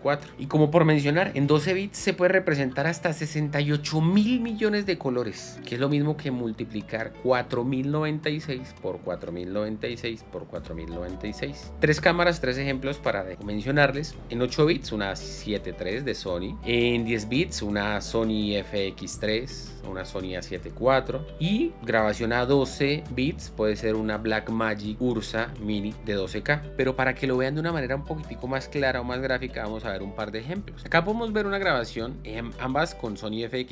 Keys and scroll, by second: 27.1 space.